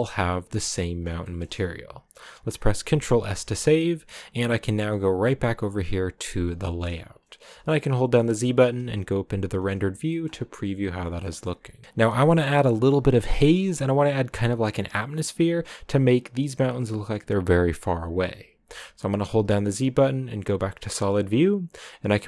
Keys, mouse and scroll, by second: 2.9 ctrl+s, 3.2-3.6 scroll down 1, 5.7 click, 6.5 shift+middle click, 7.1-7.6 scroll down 2, 9.4 z, 10.0 shift+middle click, 10.3-10.8 scroll up 1, 10.8-11.1 scroll up 1, 11.1 shift+middle click, 20.7 z.